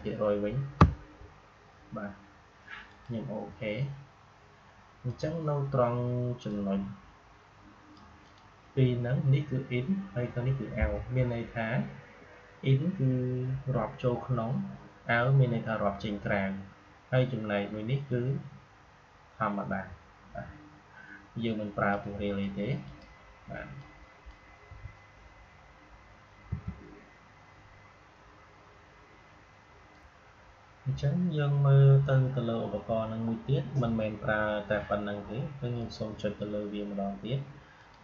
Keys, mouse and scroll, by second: 2.8-8.1 drag, 21.8-26.4 drag, 26.4 Delete, 29.8 click, 35.7 click.